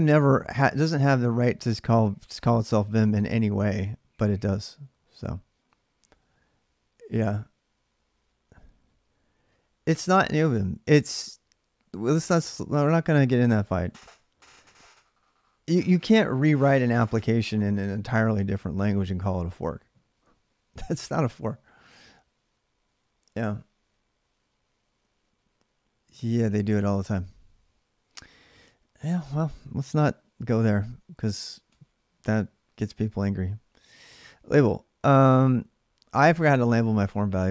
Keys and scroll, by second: 0.6-2.9 typing, 30.3 ctrl+[, 30.3 ctrl+j, 30.5-32.0 typing, 35.9 ctrl+a, 36.2-37.5 typing.